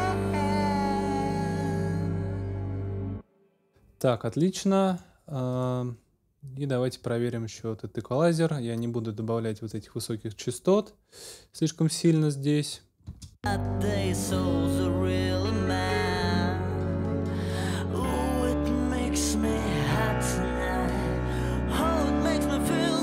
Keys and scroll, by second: 2.1 super+s, 3.0 super+space, 13.0 space.